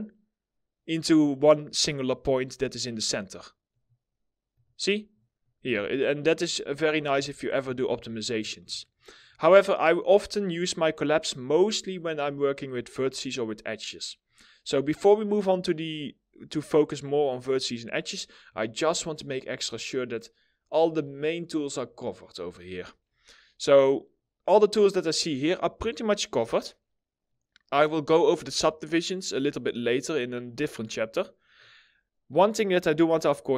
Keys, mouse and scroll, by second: 2.8 middle click, 4.9 middle click, 5.0 scroll down 1, 5.4 alt+middle click, 6.0 alt+scroll up 2, 6.7 ctrl+z, 8.5 alt+middle click.